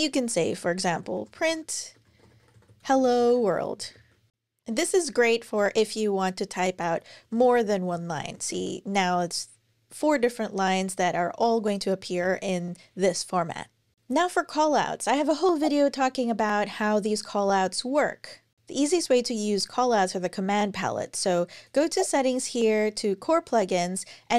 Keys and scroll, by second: 0.0-3.3 typing, 5.4 Return, 7.1-8.1 typing.